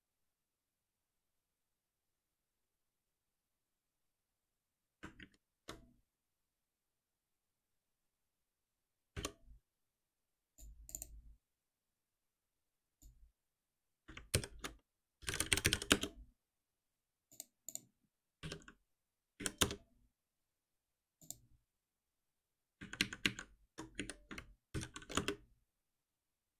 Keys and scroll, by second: 5.1 ctrl+shift+Down, 9.1 alt+F7, 14.3 ctrl+alt+m, 18.4 F6, 19.3 Down, 24.7 ctrl+alt+n.